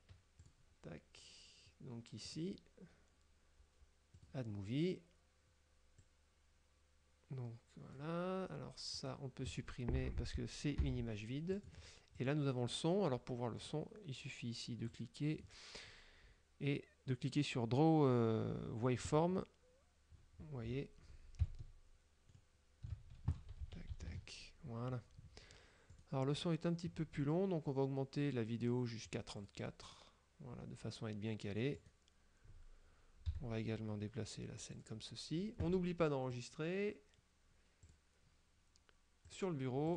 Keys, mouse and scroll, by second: 0.5 click, 2.4 click, 4.2 click, 6.1-8.2 drag, 9.0 right click, 10.9 Delete, 11.6 click, 12.3 click, 13.7 right click, 15.0 click, 16.0 scroll down 2, 19.2 click, 20.3-21.0 scroll up 1, 21.7 ctrl+middle click, 22.5 ctrl+click, 23.7 a, 24.2 KP_Decimal, 26.0 right click, 29.2 click, 31.8 right click, 33.4 g, 34.8 click, 36.4 click, 37.9 click, 39.4 click.